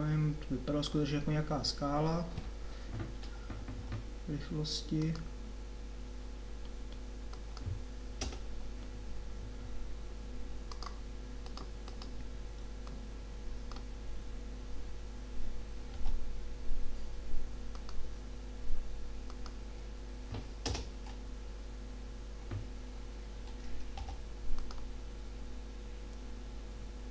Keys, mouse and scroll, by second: 4.3 k, 16.0 k, 24.1 k.